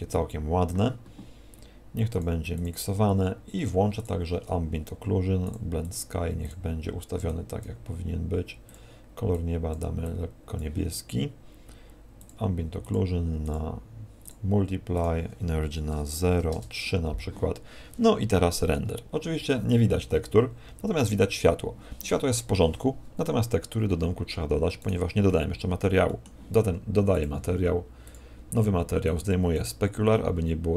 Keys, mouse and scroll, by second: 23.9 Escape, 24.7 right click, 25.3 middle click, 26.1 middle click, 28.1 click, 29.0 click.